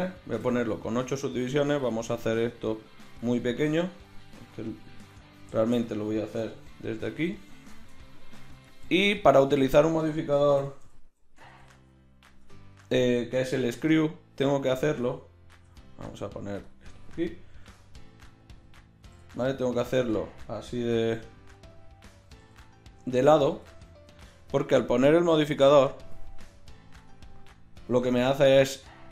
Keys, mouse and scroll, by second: 5.0 Tab, 6.4 g, 10.6 r, 13.9 s, 15.6 ., 17.5 s, 19.1 g, 20.9 s, 21.8-23.1 drag, 22.2 g, 25.6 click.